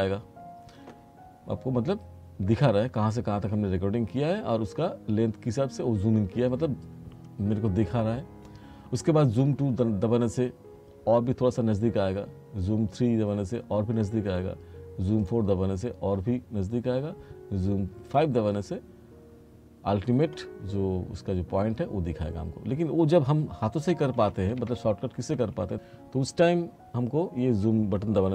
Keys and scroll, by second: 24.0 r.